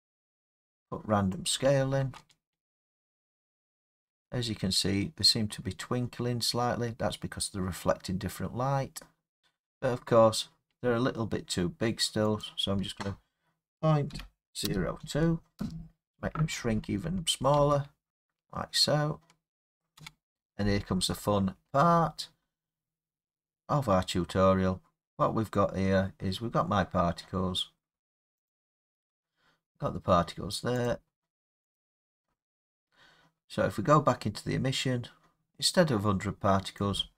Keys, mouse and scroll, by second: 1.4 click, 2.0 space, 4.3 middle click, 4.3 middle click, 4.4 middle click, 9.4 middle click, 9.4 space, 9.4 middle click, 9.5 middle click, 12.4 click, 14.7-15.0 typing, 15.6 Return, 17.0 scroll, 17.6 space, 18.1 scroll, 20.0 space, 20.1 middle click, 21.6 middle click, 21.7 middle click, 22.0 middle click, 22.4 middle click, 26.1 scroll, 28.5 click, 30.9 click, 31.8 click, 36.8 click.